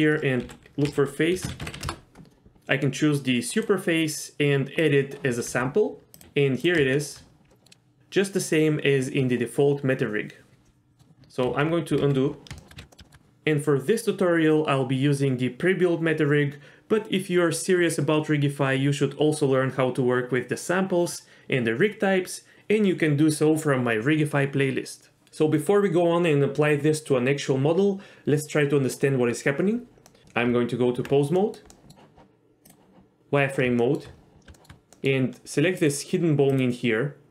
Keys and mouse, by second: 3.5 click, 5.5 g, 6.2 s, 6.9 shift+middle click, 7.5 middle click, 10.6 middle click, 11.5 ctrl+z, 12.0 ctrl+z, 12.6 shift+middle click, 12.8 ctrl+z, 12.9 middle click, 13.0 shift+middle click, 30.1 middle click, 30.2 Tab, 30.2 ctrl+z, 30.4 Tab, 31.4 middle drag, 31.7 middle drag, 33.8 shift+middle drag, 34.5 shift+middle click, 34.9 middle click, 35.8 click, 36.5 click.